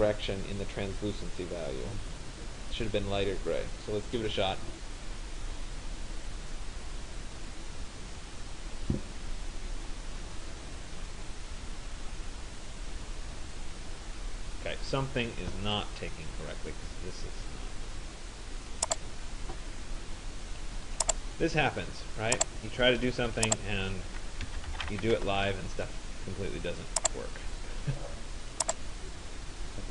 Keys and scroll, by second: 24.8 Return.